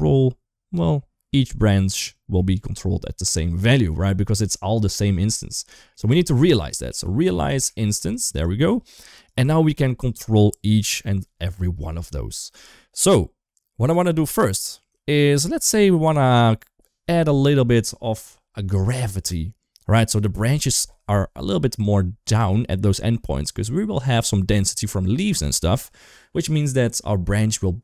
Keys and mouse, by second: 3.4 middle click, 4.2 middle click, 5.0 middle click, 5.7 middle click, 6.0 shift+a, 8.5 g, 9.7 shift+middle click, 13.3 middle click, 13.8 g, 14.9 shift+middle click.